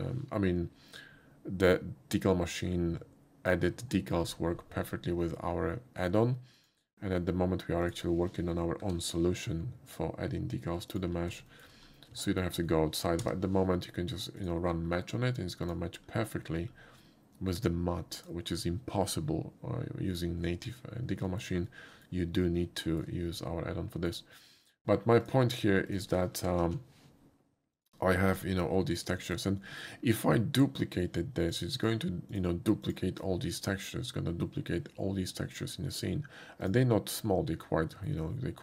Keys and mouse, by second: 6.6 click, 7.9 click, 9.2 g, 10.9 ctrl+click, 11.5 shift+middle click, 12.3 shift+middle click, 13.2 d, 14.4 click, 15.7 click, 18.2 click, 21.3 shift+middle click, 21.7 shift+middle click, 22.9 shift+middle click, 23.4-24.1 shift+middle drag, 25.3 shift+click, 25.9 click, 26.6 alt+x, 27.8 click, 28.3 click, 29.3 shift+middle click, 29.7 shift+middle click, 31.5 shift+click, 32.9 shift+click, 36.7 click, 38.0 shift+middle click.